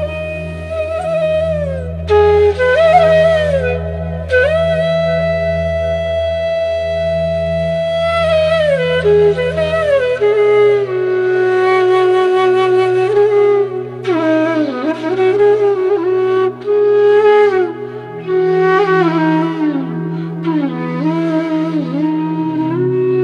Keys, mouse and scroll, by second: 5.0-7.9 drag, 10.3-11.5 typing, 11.8 click, 18.0 scroll up 1, 19.4 click, 20.0-23.2 drag.